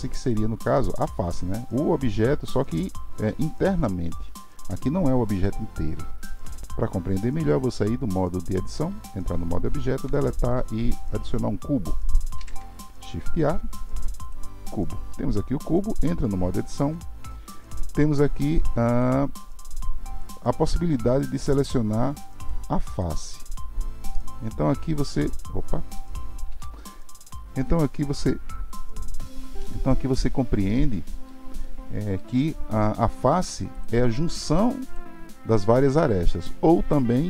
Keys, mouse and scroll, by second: 0.9 g, 6.6 Tab, 10.0 Delete, 16.8 Tab, 18.9 click, 20.2 click, 21.1-24.1 drag, 24.1-26.5 middle drag, 26.5 KP_Decimal, 27.2-27.7 scroll down 5, 27.7-30.7 middle drag, 31.6-33.7 shift+middle drag, 33.7 click, 34.9 click.